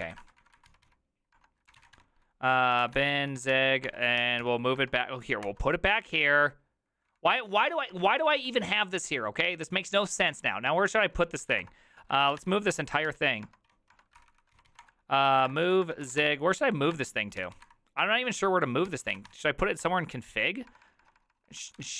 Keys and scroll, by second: 0.0-8.7 typing, 11.1-21.9 typing, 13.0 Tab, 13.6 Tab, 14.1 ctrl+c, 14.3 ctrl+c, 14.4 ctrl+c, 14.8 Return, 19.8 Tab.